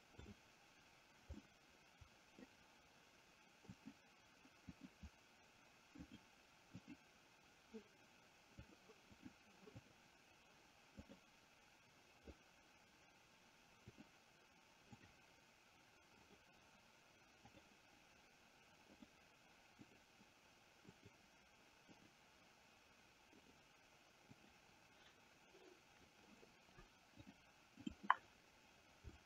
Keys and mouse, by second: 0.5 click, 1.7 middle click, 3.9 click, 4.9 click, 6.3 click, 7.1 click, 8.9 click, 9.4 click, 10.2 click, 11.3 click, 14.1 click, 15.2 click, 16.4 click, 17.7 click, 19.1 click, 19.9 click, 21.1 click, 22.2 click, 23.7 click, 24.5 click, 27.4 click.